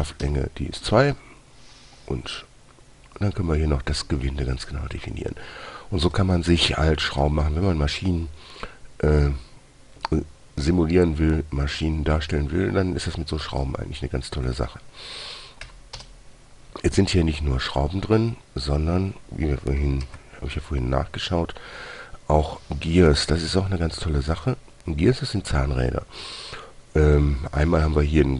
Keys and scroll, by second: 0.5 typing, 16.0 Delete, 16.3 Return, 20.4 shift+a.